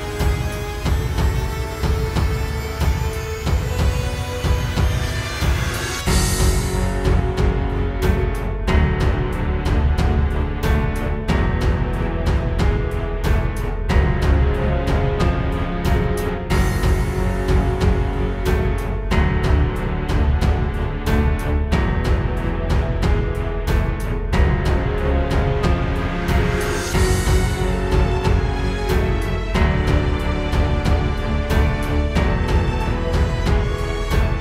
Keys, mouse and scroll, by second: 0.4-1.0 scroll down 3, 1.0 middle click, 2.6 middle click, 4.0 right click, 4.6-5.5 scroll down 5, 7.5 KP_7, 9.2 shift+middle click, 10.2 scroll up 1, 10.8 Tab, 11.6 right click, 12.6-13.3 scroll down 3, 13.4-15.7 typing, 13.9 right click, 14.2 right click, 14.8-15.4 scroll down 3, 16.1 right click, 16.4 right click, 16.9 right click, 17.1 e, 18.3 right click, 18.6 e, 19.2 scroll down 2, 19.3 e, 19.7 right click, 20.4 right click, 20.5 e, 20.9 e, 21.2 e, 21.3 Tab, 21.9-22.9 scroll up 3, 22.9 middle click, 23.9-24.5 scroll up 1, 24.5 scroll up 1, 24.5 shift+middle click, 25.7 right click, 26.6-27.5 scroll down 2, 27.5 middle click, 28.5 shift+middle click, 30.1 click, 30.3 click, 30.5 click, 30.8 click, 31.6 shift+middle click, 31.6-32.1 scroll down 3, 33.9 click, 34.0-34.4 click.